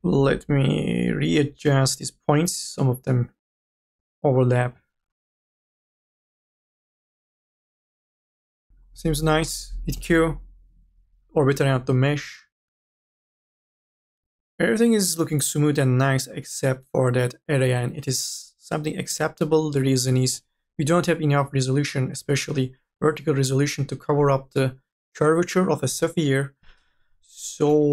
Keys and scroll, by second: 8.1 z, 9.5 q, 19.4-20.8 typing, 22.1 2, 23.7 3.